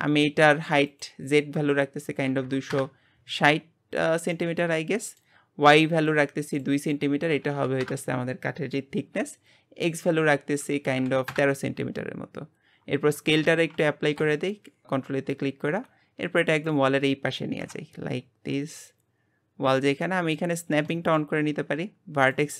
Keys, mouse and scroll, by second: 0.9-4.0 drag, 4.3-6.1 middle drag, 6.1 click, 6.9-12.9 drag, 13.4 ctrl+a, 15.3 click, 17.6 KP_7, 18.5 g, 20.0 middle click, 20.7 scroll up 2, 20.9-22.2 shift+middle drag, 22.2-22.5 drag.